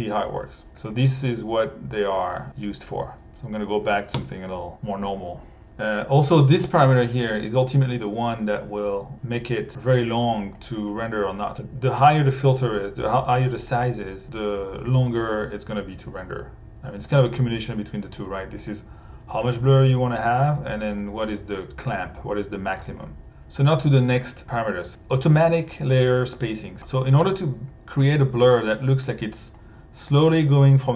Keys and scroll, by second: 3.5-4.3 typing.